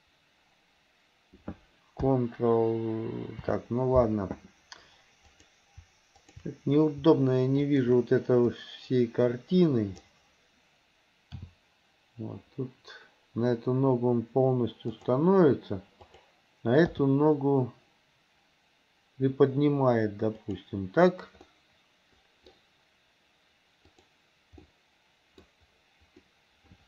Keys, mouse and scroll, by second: 5.3 click, 6.3 shift+click, 7.7 shift+click, 8.5 click, 8.7-10.1 drag, 11.5 g, 16.1 click, 17.0 g, 21.5-22.5 middle drag, 24.0 click, 24.6 middle click, 25.3 middle click, 26.3-26.8 middle drag.